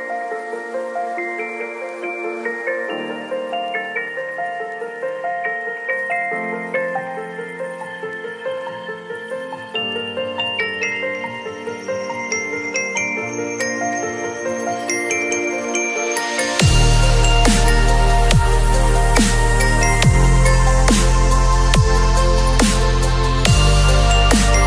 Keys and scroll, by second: 1.9 ], 5.7 [, 7.6 v, 10.4 space, 10.8 ctrl+a, 11.0 ctrl+c, 11.3 ctrl+w, 15.1 ctrl+shift+v, 15.4 ctrl+t, 23.8 v.